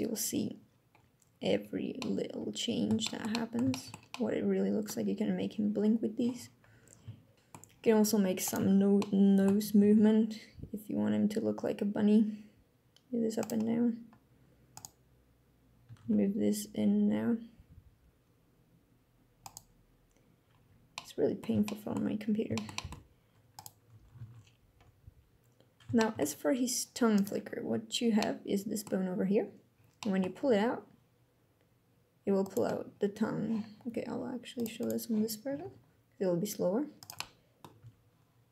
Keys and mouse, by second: 1.6-2.6 drag, 2.7 shift+drag, 3.0 drag, 3.4 shift+drag, 3.8-4.6 drag, 8.8-9.2 shift+drag, 10.0 r, 10.6 r, 15.1-15.5 drag, 15.5 r, 16.8 r, 20.6-21.1 drag, 21.3-21.6 shift+drag, 22.2 shift+drag, 22.4 click, 23.9 click, 24.6 alt+r, 25.7 shift+drag, 27.5-28.5 drag, 29.6 drag, 30.7 g, 34.3 click, 34.5 click, 35.3 g, 36.8-37.4 drag, 37.5 g.